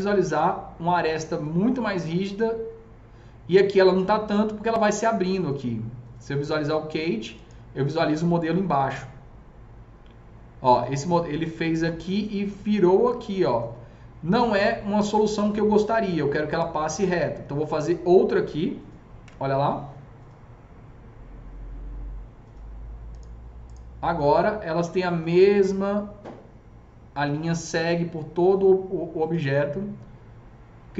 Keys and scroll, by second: 19.2 KP_0.